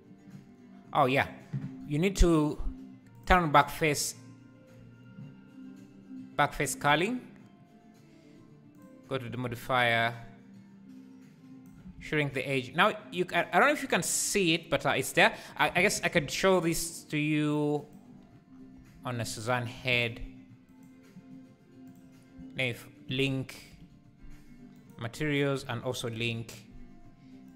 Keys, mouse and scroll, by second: 3.1 click, 10.1-12.0 shift+drag, 12.0 alt+a, 15.8 shift+right click, 15.9 shift+a, 18.8 s, 20.6 ctrl+2, 20.7-22.8 right drag, 22.8 shift+click, 24.9 ctrl+l.